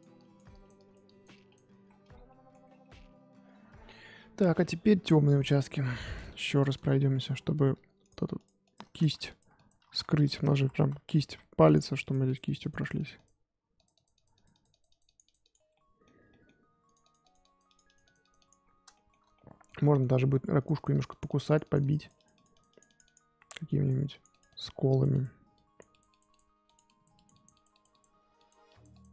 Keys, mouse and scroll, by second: 1.8-2.3 scroll down 11, 2.3 middle click, 2.5 scroll up 1, 2.6 scroll down 1, 2.8 middle click, 3.3-5.6 scroll up 5, 5.6 click, 5.7-6.8 scroll up 7, 6.3 shift+middle click, 6.8 scroll down 1, 7.0 shift+middle click, 7.7 f, 8.3 click, 9.0 ctrl+z, 9.2 click, 9.8 ctrl+z, 10.5 ctrl+z, 10.7 ctrl+z, 11.2 f, 12.0-15.7 drag, 15.7-16.8 middle drag, 16.8-18.9 drag, 18.9-20.6 shift+middle drag, 20.6-29.1 drag.